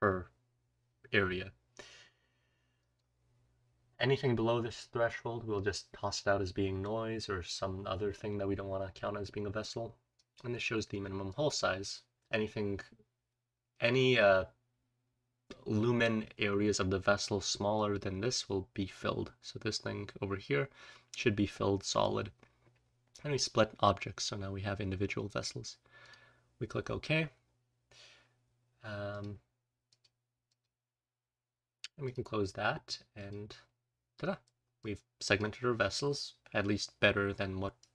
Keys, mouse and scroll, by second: 27.2-28.0 scroll up 2, 28.0-29.8 scroll up 1, 29.0 click, 29.8-32.0 scroll up 1, 29.8 click, 30.4 click, 33.1 click, 33.7-34.4 scroll down 1, 34.4-35.3 scroll down 1, 34.7 click, 35.3-35.6 scroll down 1, 35.6-36.8 scroll up 2, 36.8-37.9 scroll down 3, 37.7-37.9 drag.